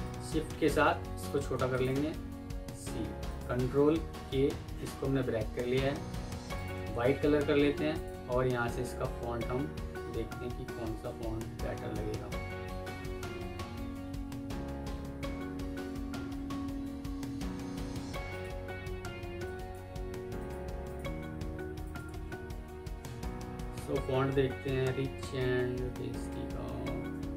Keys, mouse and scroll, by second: 1.6 shift+click, 2.0 c, 2.5 Escape, 3.9 ctrl+k, 16.2 Escape, 18.9 F2, 19.8 Escape, 20.8 double click, 25.5-26.4 scroll down 1.